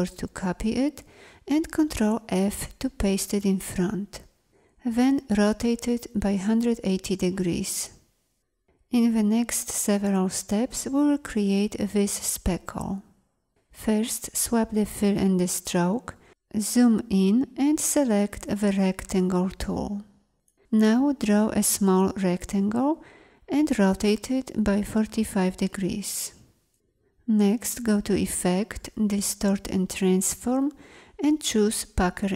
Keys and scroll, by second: 1.5 ctrl+f, 14.6 shift+x, 18.6 m.